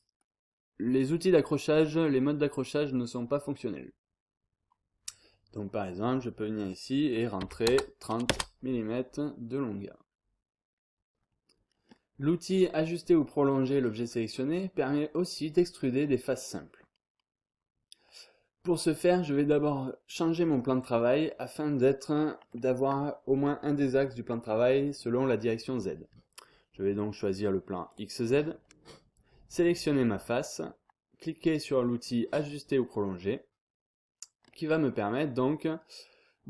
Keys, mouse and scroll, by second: 2.7 scroll up 2, 3.0-3.5 scroll down 2, 7.4 3, 7.6 0, 8.5 Return, 9.7 scroll down 2, 10.0-10.6 scroll up 2, 16.8 scroll down 2, 17.0-17.6 scroll up 2, 18.1-18.6 scroll up 2, 18.6 scroll down 2, 18.8-19.3 scroll up 2, 20.5 click, 27.9 click, 28.6 scroll down 1, 28.6-29.3 scroll up 1, 29.7 click, 30.2-30.7 scroll down 1, 32.9 click, 35.0-35.6 scroll down 1.